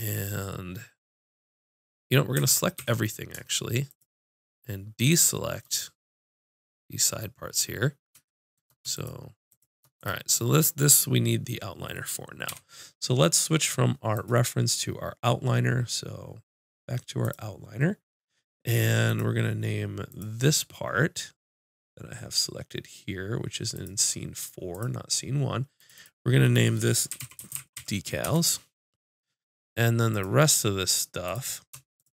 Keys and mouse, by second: 2.4 a, 2.8 a, 3.9-6.8 drag, 9.0-11.9 drag, 9.0-10.3 middle drag, 11.9 middle click, 12.5 n, 12.5-14.1 middle drag, 14.1-27.9 drag, 30.1-32.1 drag.